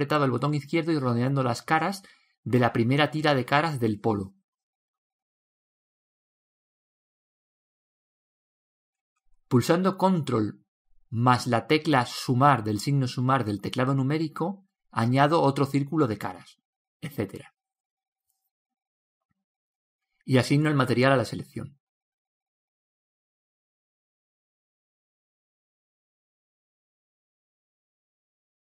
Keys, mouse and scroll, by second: 3.7 ctrl+z, 4.1-6.5 middle drag, 5.4 click, 10.0 ctrl+KP_Add, 12.4 click, 13.8 Tab, 14.7-15.3 scroll down 1, 15.3-18.6 middle drag, 18.1 alt+z, 18.9-22.7 middle drag, 26.0 KP_0, 26.9-28.7 middle drag.